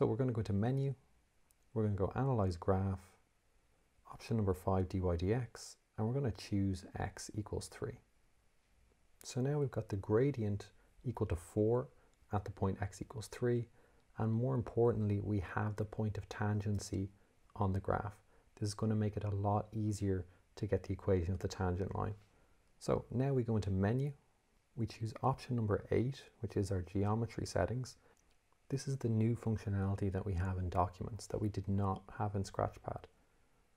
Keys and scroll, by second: 0.6 Menu, 2.6 6, 5.1 5, 6.9 3, 8.0 Return, 24.3 Menu, 32.8 8.